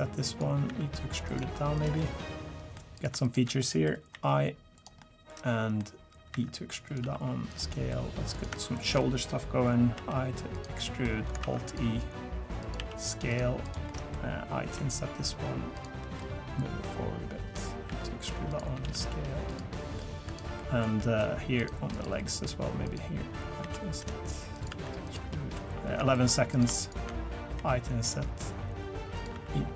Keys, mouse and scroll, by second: 0.7 e, 1.4 s, 2.0 middle click, 3.0 click, 3.2 shift+click, 3.6 middle click, 4.1 i, 5.0 middle click, 6.3 e, 7.0 s, 7.7 middle click, 8.3 click, 8.7 shift+click, 9.0 middle click, 10.0 i, 10.8 middle click, 11.4 alt+e, 12.8 s, 13.6 click, 13.9 middle click, 14.6 i, 16.0 middle click, 16.6 click, 17.9 e, 18.8 s, 19.7 middle click, 20.3 click, 20.6 middle click, 21.0 middle click, 21.6 click, 21.9 click, 22.2 middle click, 22.8 click, 23.6 i, 24.7 e, 25.3 middle click, 25.7 scroll up 1, 26.0 shift+middle click, 26.5 click, 26.8 shift+click, 27.6 i, 29.3 e.